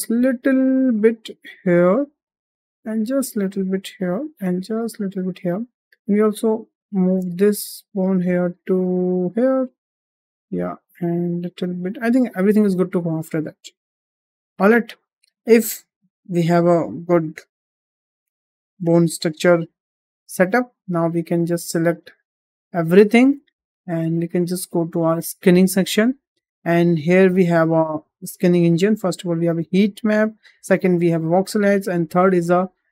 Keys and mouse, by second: 2.4 click, 2.7 g, 4.3 click, 4.5 g, 5.7 click, 6.9 g, 9.4 middle click, 10.1 middle click, 12.7 middle click, 13.4 Tab, 13.7 middle click, 14.5-15.1 middle drag, 17.2-18.5 middle drag, 18.8 shift+middle drag, 19.4 `, 20.5 shift+middle drag, 22.7-23.1 drag, 23.5 shift+middle drag, 25.5 click, 28.7-32.9 drag.